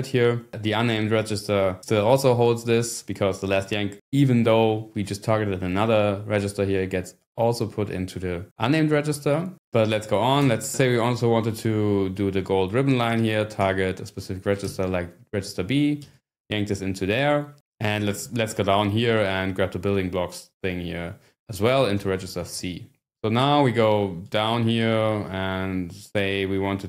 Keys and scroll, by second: 10.4 Return, 10.7-11.5 scroll down 1, 11.5 scroll down 2, 13.6 ", 14.6 b, 16.0 y, 18.0 6, 18.3-19.1 scroll down 1, 21.7-23.6 typing, 24.4 ctrl+d.